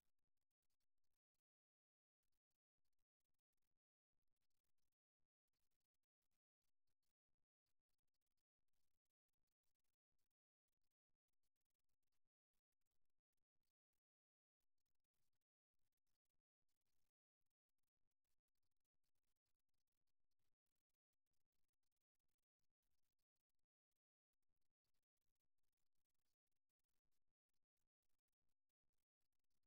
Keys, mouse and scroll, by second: 5.3-8.1 drag, 8.1 a, 8.5 a, 10.0 g, 14.3-16.3 middle drag, 16.3-18.2 right drag, 19.1-21.0 right drag, 21.2-22.2 right drag, 23.3 right click, 25.6 right click.